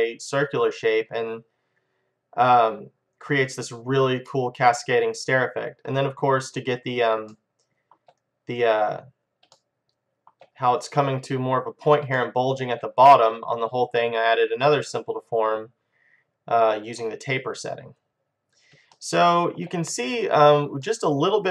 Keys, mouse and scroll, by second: 4.5 middle click, 5.4 middle click, 7.7-9.5 middle drag, 9.7 middle click, 12.5-15.7 middle drag, 16.0 middle click, 18.4-20.4 middle drag, 21.0 middle click.